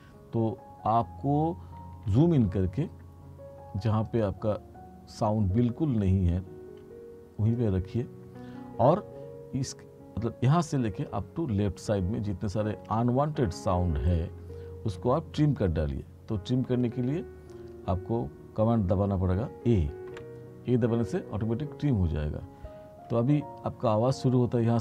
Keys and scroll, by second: 2.1 t, 15.7 r, 20.2 a.